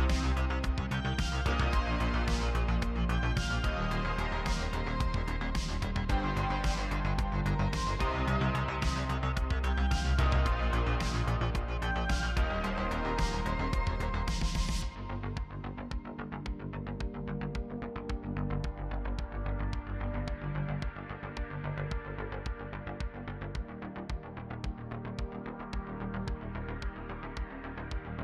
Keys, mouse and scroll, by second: 0.1 middle click, 0.2-1.4 scroll up 6, 0.2 middle click, 0.4 click, 0.6 middle click, 1.1 shift+middle click, 1.3-3.0 typing, 1.7 scroll down 11, 1.8 middle click, 2.0 middle click, 2.1 alt+a, 2.2 Tab, 2.3 shift+middle click, 2.3 scroll up 1, 2.5 middle click, 2.7 click, 2.9 middle click, 2.9 Tab, 3.3 middle click, 3.4 scroll down 3, 3.6 middle click, 3.9-4.3 scroll up 4, 3.9 middle click, 4.0 alt+a, 4.0 middle click, 4.1 click, 4.1 KP_3, 4.2 shift+middle click, 4.3 Tab, 4.4 shift+middle click, 4.5 scroll down 2, 4.8 scroll up 1, 4.9 shift+middle click, 4.9 shift+scroll down 1, 5.0 click, 5.2 ctrl+r, 5.4 middle click, 5.4-8.2 typing, 5.6 middle click, 5.9 click, 5.9 middle click, 6.1 middle click, 6.3 middle click, 6.4 scroll up 3, 6.7 Tab, 6.7 scroll down 5, 6.8 Tab, 6.9 shift+middle click, 6.9-7.6 scroll up 3, 7.1 click, 7.1 shift+middle click, 7.3 middle click, 7.9 scroll down 1, 7.9 middle click, 8.1-9.6 scroll up 5, 8.4 click, 9.5 shift+middle click, 9.6 scroll down 2, 9.6 shift+middle click, 9.7-10.1 scroll up 2, 10.1 scroll down 2, 10.1 middle click, 10.2 shift+middle click, 10.4 scroll up 1, 10.4-15.4 typing, 10.5 scroll down 1, 10.5 scroll up 2, 10.6 middle click, 10.8 shift+middle click, 10.8 scroll down 1, 10.9 middle click, 10.9 scroll up 1, 11.1 shift+click, 11.2-11.9 scroll down 1, 11.9 shift+middle click, 12.0 scroll up 1, 12.1 middle click, 12.6 middle click, 12.7 click, 13.4 Tab, 13.5 middle click, 13.5 Tab, 13.8-14.3 scroll up 3, 14.1 middle click, 14.3 middle click, 14.4 Tab, 14.5 middle click, 14.8 alt+a, 14.8 scroll down 6, 14.9 middle click, 15.0 middle click, 15.2-16.0 scroll up 9, 15.2 click, 15.2 middle click, 15.3 middle click, 15.4 shift+middle click, 15.7 shift+middle click, 16.0 click, 16.2 scroll down 1, 16.4 shift+click, 16.7 scroll up 1, 16.8 scroll down 2, 16.8 alt+a, 16.9 middle click, 17.0 scroll up 9, 17.0 ctrl+z, 17.9 middle click, 17.9 scroll up 1, 18.0 ctrl+r, 18.2 shift+middle click, 18.3 2, 18.8 alt+a, 18.9 middle click, 18.9 Tab, 18.9 scroll up 2, 19.0 ctrl+r, 19.2 ctrl+z, 19.7 z, 19.8 scroll up 2, 19.8 middle click, 20.2 shift+middle click, 20.4 2, 20.7 middle click, 20.9 click, 21.4 z, 21.4 alt+a, 21.5 shift+middle click, 21.6-22.1 scroll up 4, 21.8 ctrl+r, 22.0 middle click, 22.0 ctrl+z, 22.6 middle click, 22.7 1, 23.2 scroll down 1, 23.2 alt+a, 23.3 middle click, 23.3 Tab, 23.4 scroll up 3, 23.4 shift+middle click, 23.5 click, 23.6 middle click, 23.7 middle click, 23.7 ctrl+r, 23.9 scroll down 10, 24.0 middle click, 24.1 scroll up 2, 24.3 z, 24.5 ctrl+click, 24.5 z, 24.6 g, 24.8 Tab, 24.8 middle click, 25.0 Tab, 25.1 g, 25.6 middle click, 25.9 click, 26.3 middle click, 26.6 z, 26.7 middle click, 26.7 scroll up 2, 26.7 shift+middle click, 27.0 click, 27.0 scroll down 1, 27.2 middle click, 27.6 click, 27.7 middle click, 27.8 Tab, 27.9 middle click, 28.0 Tab, 28.0 middle click, 28.0 z, 28.1 middle click.